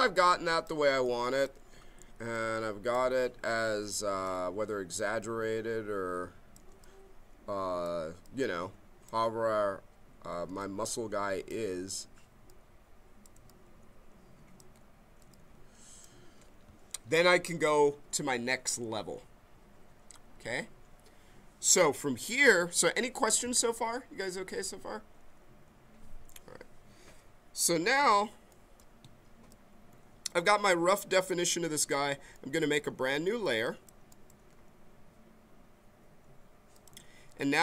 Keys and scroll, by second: 1.9 b.